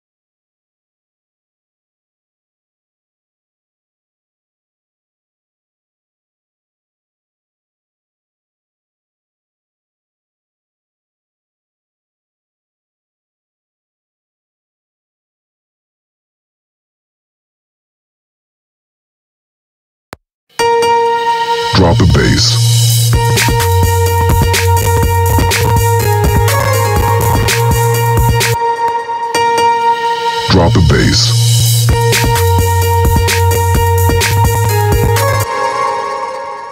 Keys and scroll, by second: 16.2 Left, 19.5 space, 27.9 space, 35.0 space.